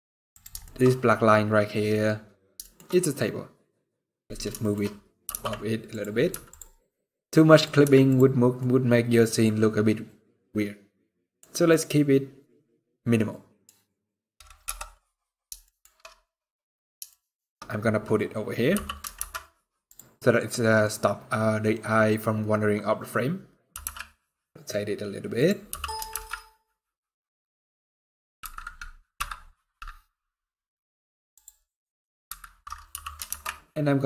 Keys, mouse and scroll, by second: 0.3 shift+middle click, 0.5 scroll up 1, 1.0-2.2 scroll up 5, 2.3 shift+middle click, 2.5 scroll up 2, 3.3-4.3 scroll down 13, 4.3 shift+middle click, 4.5-5.3 scroll up 5, 4.9 g, 5.8 scroll down 3, 6.0 z, 6.4 scroll down 1, 6.5 middle click, 7.5 z, 8.0 scroll down 4, 8.3 middle click, 11.4 middle click, 14.3 KP_0, 15.3 shift+middle click, 15.9-16.3 scroll down 3, 16.2-16.8 scroll up 3, 16.8 shift+middle click, 17.1 shift+scroll down 1, 18.4 g, 20.2 scroll down 2, 20.6-21.4 scroll up 1, 23.4 r, 25.3 g, 32.6 g.